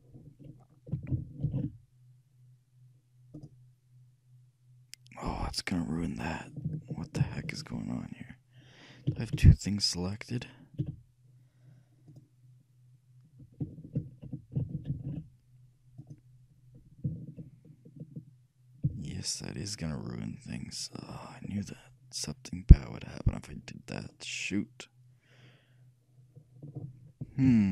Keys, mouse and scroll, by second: 1.5 ctrl+alt+shift+c, 5.3-6.5 middle drag, 7.4 ctrl+z, 9.2 a, 9.4 a, 11.0 a, 12.2-14.1 right drag, 15.0 ctrl+alt+shift+c, 19.1 ctrl+z, 21.5-23.1 middle drag, 27.6 KP_3.